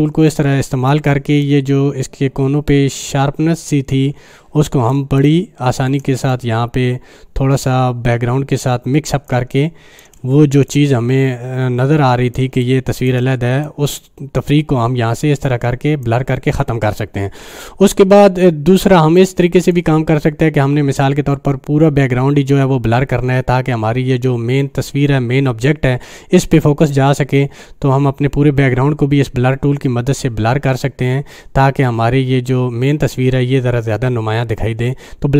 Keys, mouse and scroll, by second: 0.1 space, 0.5 click, 0.5-0.9 space, 1.4-5.2 drag, 5.0 space, 5.2 click, 5.5-6.1 space, 6.3-9.4 drag, 9.3 space, 9.5 click, 9.8-10.1 space, 10.0 space, 10.7-12.6 drag, 12.4 space, 12.6 click, 12.9-13.2 space, 13.6-15.8 drag, 15.6-16.1 click, 16.1 click, 18.8 click, 19.2 right click, 19.6 click.